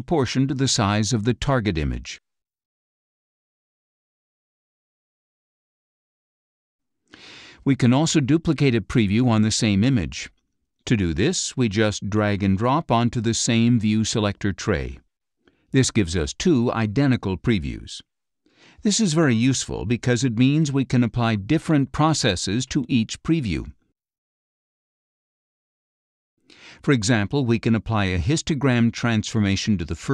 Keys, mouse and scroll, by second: 2.3-5.2 drag, 11.1-13.7 drag, 16.9 click, 18.6 click, 19.5 click, 20.6 click, 23.1 click, 26.4-30.1 drag.